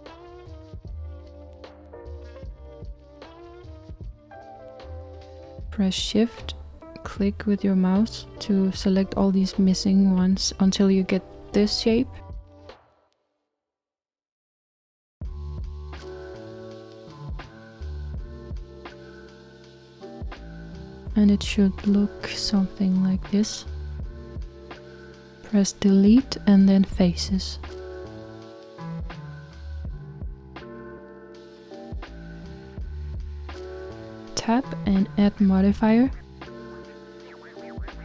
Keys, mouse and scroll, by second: 5.3 shift+click, 6.7 shift+click, 9.1 shift+click, 10.1 shift+click, 11.5 shift+click, 12.7 shift+click, 21.2-21.9 scroll down 2, 21.9-25.9 middle drag, 25.9 Delete, 28.0-34.5 middle drag, 34.8 Tab.